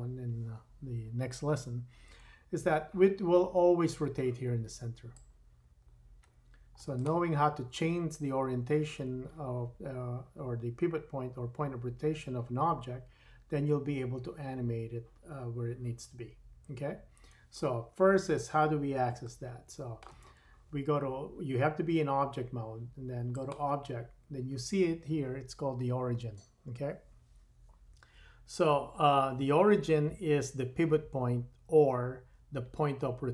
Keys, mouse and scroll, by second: 5.1-7.1 drag, 17.9-19.1 scroll down 3, 19.1-23.3 shift+middle drag, 23.3-33.3 drag.